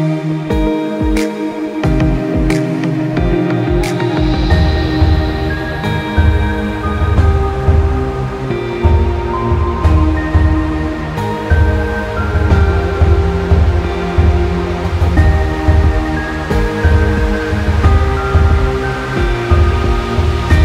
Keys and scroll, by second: 12.7 ctrl+j, 15.3 ctrl+z, 19.3 ctrl+z, 19.7 ctrl+z.